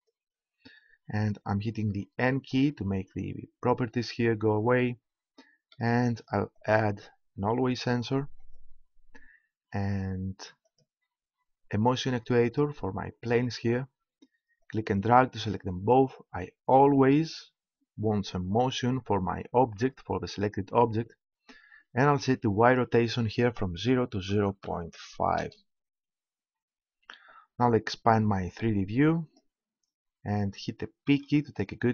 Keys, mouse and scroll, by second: 2.1 n, 29.4 click, 31.0 p.